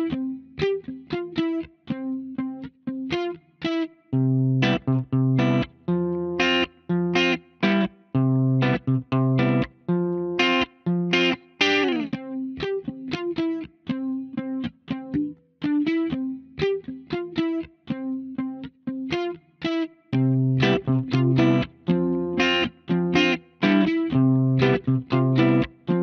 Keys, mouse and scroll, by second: 1.5 middle click, 2.6-3.0 scroll down 1, 3.3 middle click, 3.4 scroll up 1, 3.9 middle click, 4.2 scroll down 1, 4.5 shift+middle click, 5.2-5.7 scroll up 1, 6.2-7.3 scroll down 1, 7.3 right click, 8.3 click, 9.1 middle click, 12.1 click, 13.5 scroll up 1, 18.7 click, 21.3 click, 24.0 middle click.